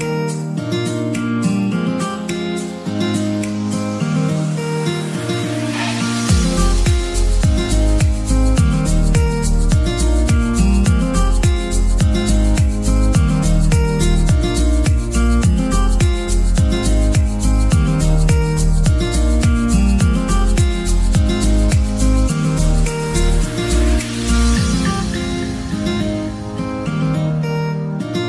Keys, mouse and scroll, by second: 0.7 Tab, 1.1 middle click, 1.7 Tab, 2.0-2.7 middle drag, 2.7 shift+a, 7.3 r, 8.8 Tab, 9.6 s, 10.6 middle click, 10.9 g, 12.6 middle click, 12.8-13.2 scroll up 4, 13.2 shift+middle click, 13.5-14.0 scroll up 1, 14.9-16.2 right drag, 16.2-18.2 drag, 18.9 ctrl+r, 21.4 a, 21.7 g, 22.7 ctrl+r, 25.6-26.8 middle drag, 26.8-27.3 scroll up 4, 27.7 click.